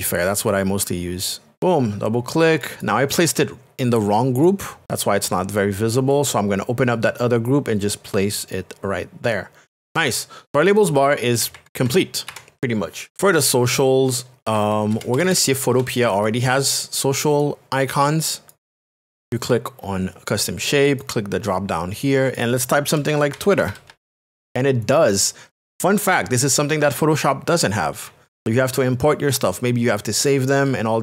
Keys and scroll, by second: 0.5 shift+space, 11.5 ctrl+KP_Subtract, 14.9 ctrl+KP_Add, 15.8 KP_Add, 23.0-24.5 typing.